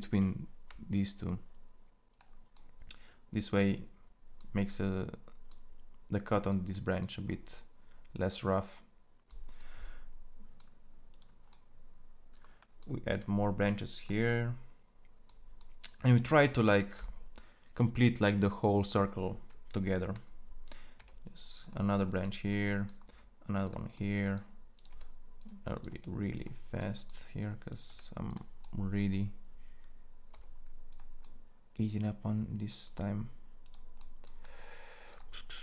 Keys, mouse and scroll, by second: 11.5-12.8 middle drag, 12.8 e, 21.9 e, 22.8 e, 24.7 e, 26.2 e, 27.6 e, 31.1 e, 34.2 e, 35.5 e.